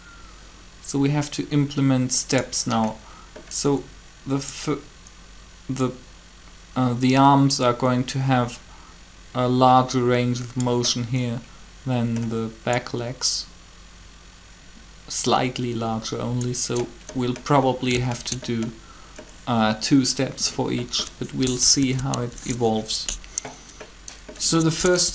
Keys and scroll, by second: 21.6 Down, 22.2 Up, 24.9 Up.